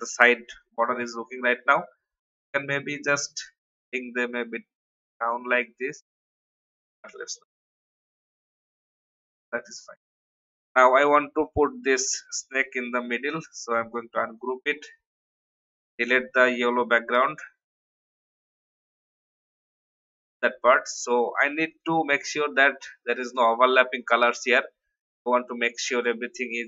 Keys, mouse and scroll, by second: 0.2-1.3 drag, 2.4 click, 3.0 alt+scroll up 1, 4.0 scroll down 1, 6.5 Up, 6.6 Up, 6.8 Up, 6.9 Up, 7.8-8.2 alt+scroll down 1, 8.7-9.3 scroll up 1, 9.3 click, 9.9-10.4 alt+scroll down 2, 11.4 click, 12.4 right click, 13.5 click, 15.1 Delete, 16.0 scroll down 1, 16.8 alt+scroll up 1, 17.8 click, 19.2 Delete, 20.5 alt+scroll up 1, 21.7-23.3 drag.